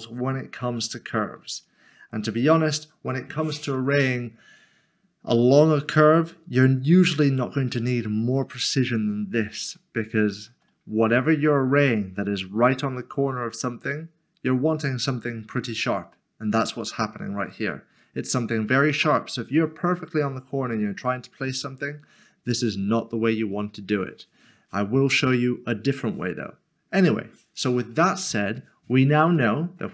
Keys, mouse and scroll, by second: 0.5 ctrl+z, 1.7 scroll down 1, 9.2 scroll up 1, 9.7 shift+middle click, 27.5 click, 29.4 shift+middle click.